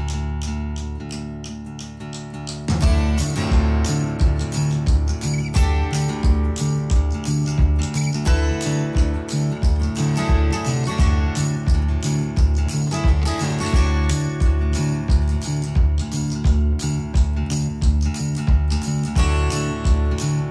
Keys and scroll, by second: 6.0 space, 14.1 Delete.